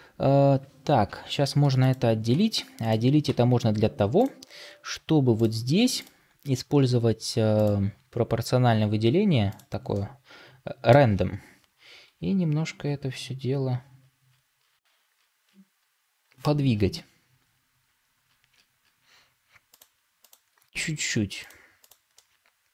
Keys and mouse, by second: 2.2 Tab, 3.2 Tab, 8.2-9.8 drag, 9.8-10.9 middle drag, 11.9 g, 20.5 g, 22.0-22.7 middle drag.